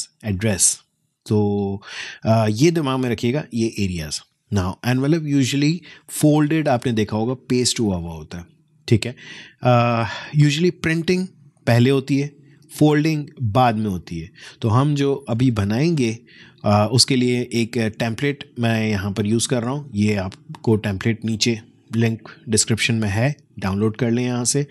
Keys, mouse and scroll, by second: 18.8 click, 20.5 space, 20.7 click, 21.0 space.